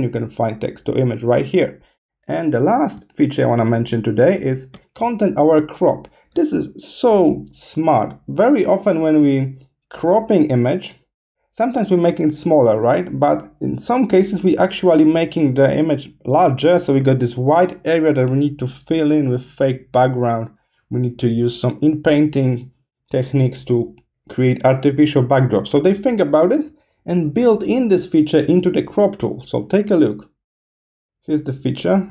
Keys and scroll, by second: 2.9 space, 4.4 space.